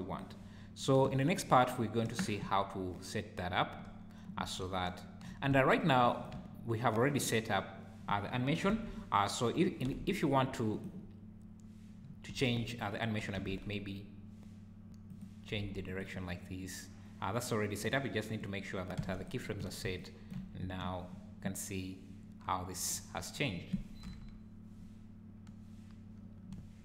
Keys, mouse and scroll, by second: 1.2 shift+right click, 2.2 space, 5.3 Escape, 5.8 shift+right click, 7.1 click, 8.7 Down, 9.9 r, 12.3 t, 12.4 t, 13.3 r, 15.5 r, 18.3 click, 19.0 g, 20.0 shift+right click, 20.6 space, 24.1 Escape, 24.1 KP_1, 26.5 `.